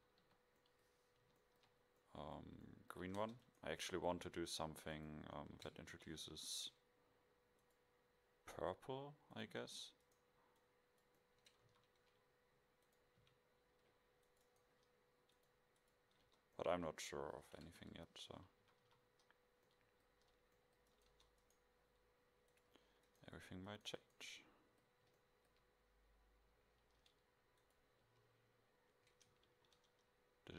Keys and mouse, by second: 0.3 KP_5, 3.3 Tab, 4.3 e, 6.0 alt+m, 9.4-10.5 drag, 11.3 middle click, 11.9 a, 13.3 c, 16.4 Tab, 17.7 KP_0, 18.7 a, 18.9 a, 21.2 Tab.